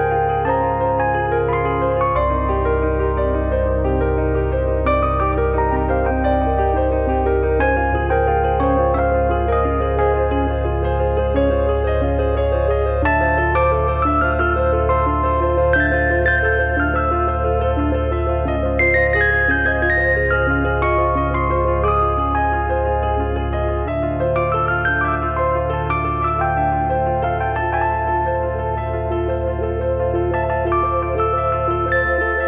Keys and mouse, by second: 0.0 click, 1.9 middle click, 5.2 click, 6.6 middle click, 7.4 shift+p, 7.9 middle click, 9.7 shift+b, 10.2 click, 10.5 click, 11.0 e, 16.3 middle click, 17.1 click, 17.8 click, 18.5 middle click, 19.1 click, 19.8 click, 20.8 middle click, 21.7 click, 22.0 middle click, 22.7 click, 24.1 e, 24.2 click, 24.3 middle click, 24.8 click, 26.0 click, 26.6 click, 27.2 click, 29.6 click, 29.7 middle click, 31.3 middle click, 32.0 click.